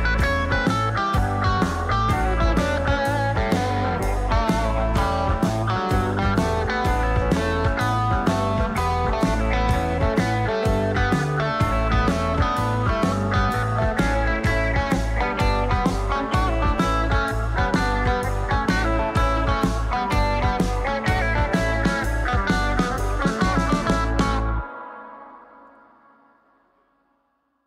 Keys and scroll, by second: 2.8 ctrl+a, 3.7-4.6 typing, 5.0 Return, 6.8 typing, 8.0 ctrl+shift+a, 12.6 d.